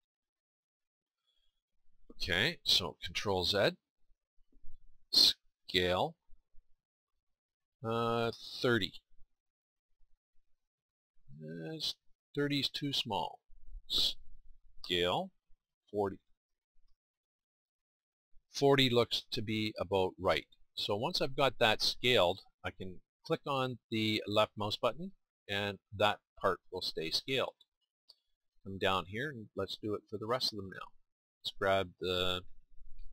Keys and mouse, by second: 3.5 ctrl+z, 5.6 s, 14.8 s, 24.9-30.3 middle drag, 30.3-31.9 drag, 31.9-33.1 middle drag.